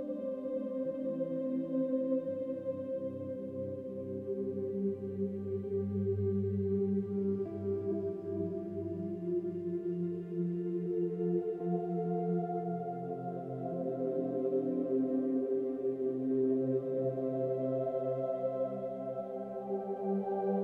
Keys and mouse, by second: 1.6 shift+drag, 2.1 shift+click, 2.5 shift+click, 3.7-4.2 drag, 5.0-5.9 typing, 6.3 click, 6.8 click, 7.2-8.2 typing, 7.4-8.9 drag, 9.5 typing, 10.2-11.5 drag, 11.9 g, 13.1-14.4 typing, 13.4-15.6 drag, 15.6-17.1 typing, 15.8 click, 18.5 g, 19.8 click, 20.4 click.